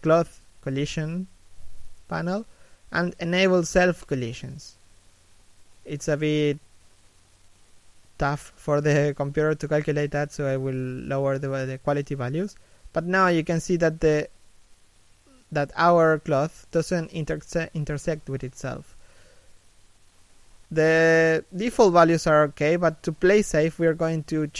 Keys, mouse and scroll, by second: 0.3-4.3 scroll down 1, 4.3 shift+middle click, 8.6-11.6 scroll up 1, 11.8-13.7 scroll up 1, 15.0-16.0 scroll up 1, 16.4-16.8 scroll down 1, 16.8 middle click, 19.8 middle click, 20.4 scroll down 1.